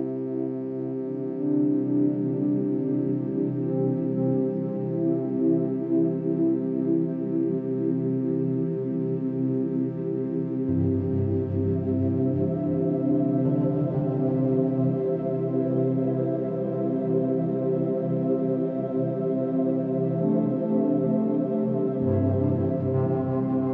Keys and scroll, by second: 6.9 ctrl+z, 14.2-14.8 space, 17.9 ctrl+z, 23.1 Escape.